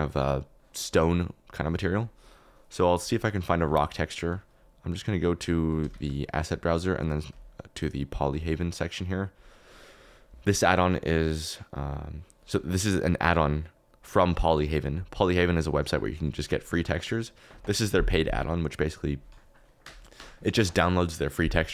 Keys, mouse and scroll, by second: 10.9 click, 11.5 click.